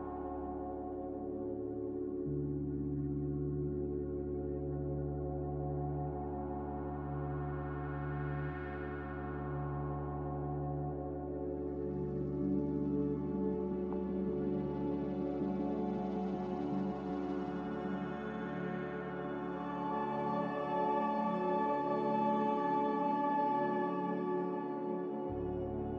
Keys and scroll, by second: 1.8 ctrl+z, 2.2 ctrl+z, 3.7 ctrl+z, 4.2 ctrl+z, 6.0 ctrl+z, 7.0-8.8 typing, 10.3 b, 11.3 Delete, 13.9 Delete.